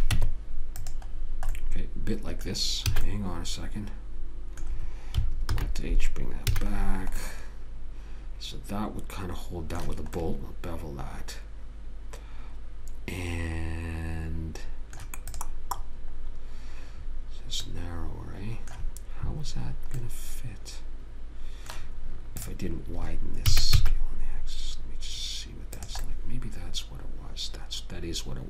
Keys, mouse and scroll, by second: 0.2 a, 0.4 Tab, 3.3 a, 5.8 alt+h, 6.8 a, 10.5 middle click, 15.6 click, 18.1-22.1 middle drag, 22.7 click, 23.8 s.